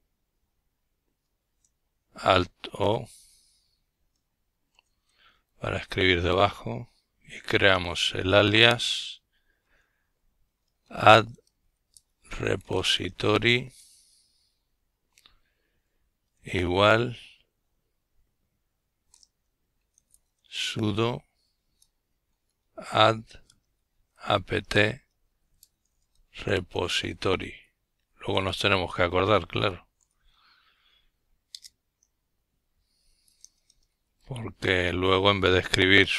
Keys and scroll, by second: 0.0 alt+o, 0.6 alt+o, 3.0-9.9 typing, 11.8-12.6 typing, 15.4-16.5 typing, 17.5-24.2 typing, 25.6 typing, 27.2 Return, 28.7-32.1 typing.